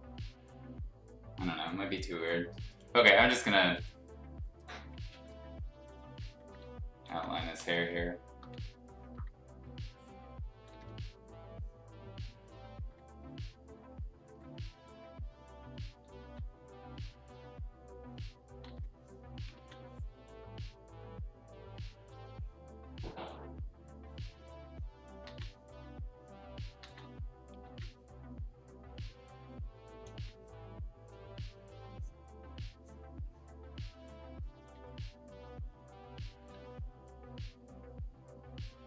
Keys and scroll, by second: 7.0 ctrl+z, 7.6 [, 7.8 [, 7.9 [, 8.4 ], 10.7 ctrl+z, 12.8 x, 14.2 x, 18.6 ctrl+z, 19.5 ctrl+z, 25.2 ctrl+z, 26.8 ctrl+z, 27.6 ctrl+z, 28.9 x, 30.1 ctrl+z, 34.7 x.